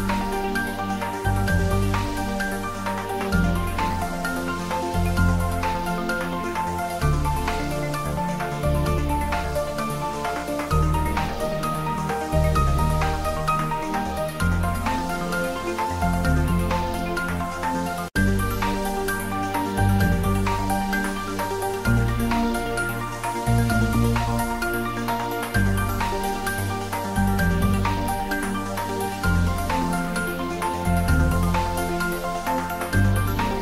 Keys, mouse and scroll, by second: 0.2 click, 1.3-5.6 drag, 5.6 Tab, 6.5 ctrl+s, 7.5 click, 9.2 middle click, 10.8 click, 13.4 click, 15.9 click, 18.3 click, 23.6 ctrl+s, 23.9-25.4 ctrl+middle drag, 25.4 click, 26.3 ctrl+s, 28.5 ctrl+s, 30.8 click, 31.4 x, 31.7 click.